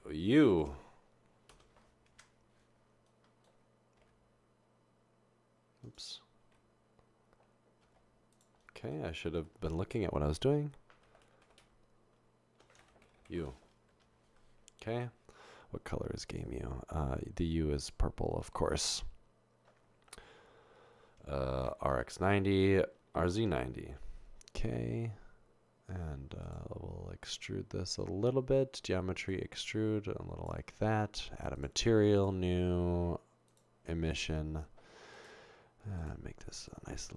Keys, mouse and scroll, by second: 0.1-0.5 typing, 1.5 typing, 3.1 Return, 12.4-13.9 typing, 16.1 Tab, 22.0-23.8 typing, 22.5 Return, 29.3-30.5 drag, 32.2 click, 33.5 click, 36.0 click, 36.7 click.